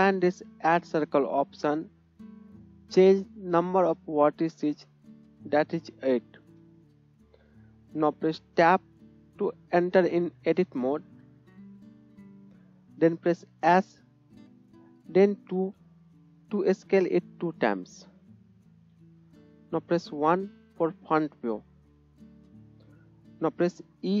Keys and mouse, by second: 1.4-24.2 middle drag, 10.8 Tab, 13.8 s, 18.7 KP_1, 21.2-24.2 drag, 21.2-24.2 right drag.